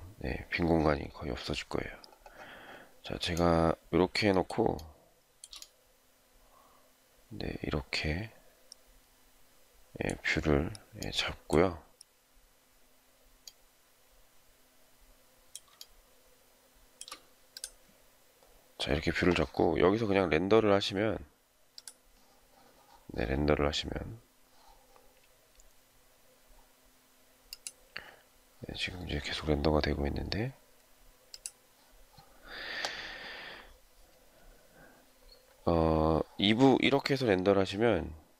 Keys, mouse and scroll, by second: 4.6 shift+scroll down 1, 4.8 shift+middle click, 15.6 shift+middle click.